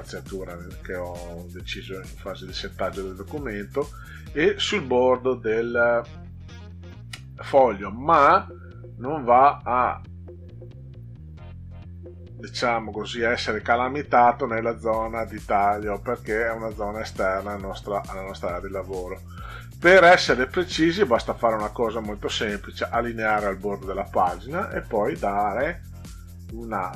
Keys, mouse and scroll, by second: 3.2-5.0 drag, 8.1-19.0 drag, 20.6 click, 22.2 click, 26.6 click.